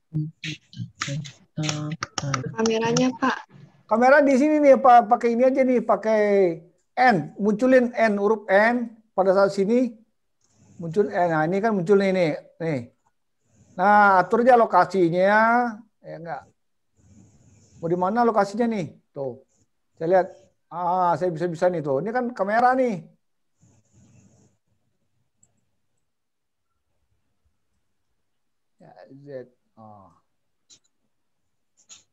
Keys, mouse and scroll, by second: 5.8 click, 11.1 n, 11.8 n, 12.4 n, 13.0 n, 18.4 click, 20.5 click, 26.2 click, 29.0 click, 31.0 click.